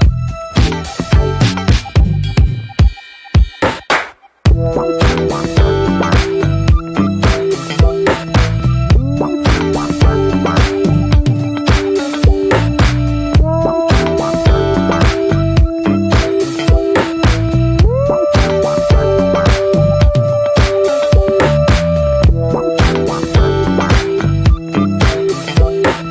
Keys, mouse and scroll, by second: 0.1 Tab, 0.3 middle click, 0.6 Tab, 0.7-2.5 middle drag, 2.5 click, 3.4 2, 3.5-4.6 drag, 4.6 ctrl+z, 4.8-5.4 middle drag, 5.4 scroll down 1, 5.5 Tab, 5.6 click, 6.2 ctrl+a, 6.9 ctrl+a, 7.6 Tab, 7.9 middle click, 8.1 a, 8.6-9.4 right drag, 9.4-10.3 middle drag, 10.3 3, 10.5-11.4 drag, 11.4-12.1 middle drag, 12.1 2, 12.7-13.1 drag, 13.1-13.6 middle drag, 13.6-13.9 shift+drag, 13.9 middle click, 14.4 shift+drag, 14.6 middle click, 15.2 shift+click, 15.5-15.8 middle drag, 15.8-16.9 right drag, 16.9 a, 17.4 right click, 18.1 middle click, 18.4 ctrl+s, 18.8 click, 19.0 ctrl+s, 19.5 /, 19.8 middle click, 20.2 ctrl+s, 20.3 drag, 20.5 middle click, 20.8 ctrl+s, 21.1-21.6 drag, 21.6-22.0 scroll up 1, 22.0 click, 22.8 Tab, 25.2 Tab, 25.4-26.1 drag.